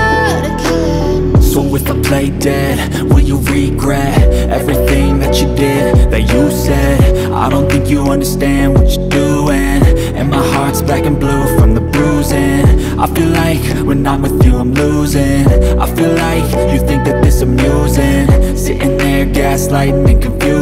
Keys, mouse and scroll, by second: 1.2 ctrl+Tab, 4.6 click, 5.9 click, 9.4 ctrl+Tab, 11.5 click, 11.9 ctrl+Tab, 14.8 KP_0, 15.9 click, 17.3 ctrl+z, 18.5-20.6 drag.